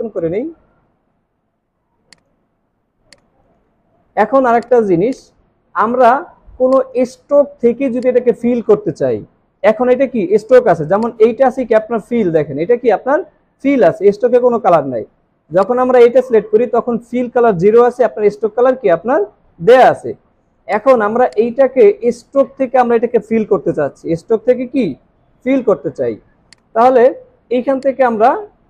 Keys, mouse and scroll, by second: 5.1 double click, 5.6 alt+scroll up 1, 25.8 alt+scroll down 1, 26.5 space, 27.7 space.